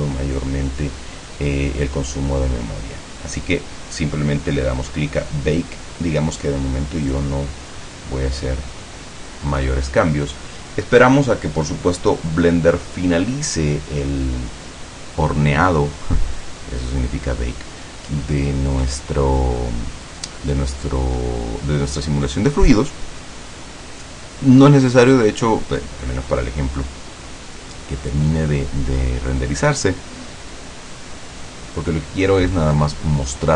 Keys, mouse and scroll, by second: 7.2 click.